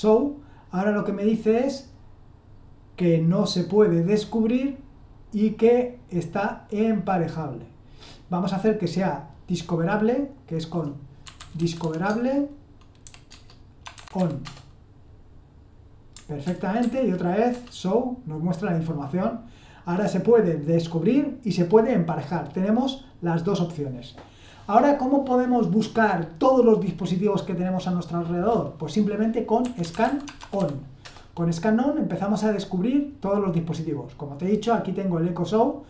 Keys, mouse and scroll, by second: 5.3-6.5 drag, 6.7-7.4 scroll up 2, 7.4-10.0 scroll up 1, 10.0-11.2 scroll up 1, 11.0-14.9 typing, 16.4 ctrl+p, 16.8 ctrl+p, 17.5 Return, 29.3-31.0 typing.